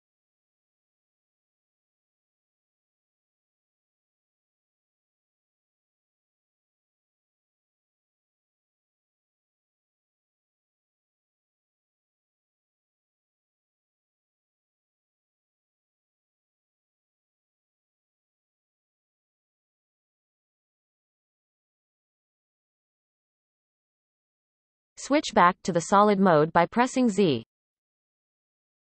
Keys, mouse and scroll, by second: 0.1 shift+middle click, 0.4 c, 4.5 scroll down 1, 4.7-5.9 scroll up 7, 5.2 shift+middle click, 5.9 shift+click, 6.3 shift+middle click, 6.4 scroll up 2, 6.6 shift+middle click, 7.3 c, 9.0 scroll up 4, 9.3 shift+click, 10.3-11.4 shift+drag, 11.7-12.5 scroll down 18, 12.5 shift+middle click, 12.7-13.2 scroll up 4, 13.5 scroll down 6, 13.8 shift+middle click, 14.4 f, 15.6 alt+a, 16.1-17.5 alt+shift+drag, 17.5 shift+middle click, 17.9 alt+shift+click, 18.6-19.1 scroll down 1, 19.3 f, 19.4 scroll down 2, 19.6 shift+middle click, 20.0 alt+a, 20.6 alt+shift+click, 21.4 alt+shift+click, 22.3-22.9 scroll up 4, 22.9 f, 23.1-25.3 scroll down 4, 25.3 Tab, 25.8 z, 28.2-28.8 shift+middle drag.